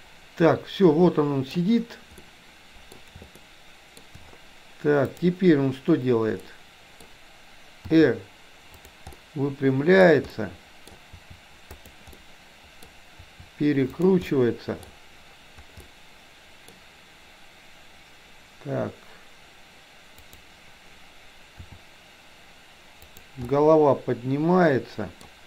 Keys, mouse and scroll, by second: 2.2 middle click, 3.4-4.1 shift+middle drag, 5.1 click, 6.5-7.1 middle drag, 8.0 r, 9.1-10.1 middle drag, 10.5-11.0 middle drag, 11.1 r, 12.2 middle click, 13.2 r, 14.4 middle click, 15.9 middle click, 20.2 click, 21.6 r, 23.6-25.2 middle drag.